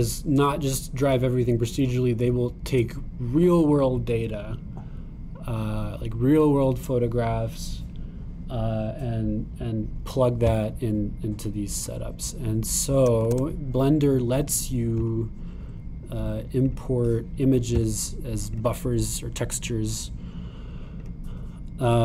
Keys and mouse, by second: 14.2 shift+a, 19.8-22.0 drag.